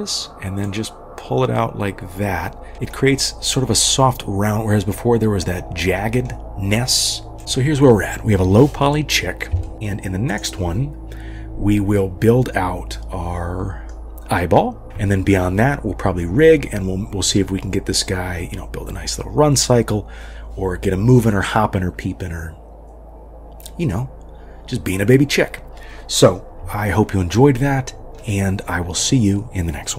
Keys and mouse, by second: 1.0-2.7 drag, 2.7 middle click, 5.9 middle click, 7.4 ctrl+s, 7.4 KP_3, 9.6 shift+click, 10.5 click, 12.0-13.9 middle drag.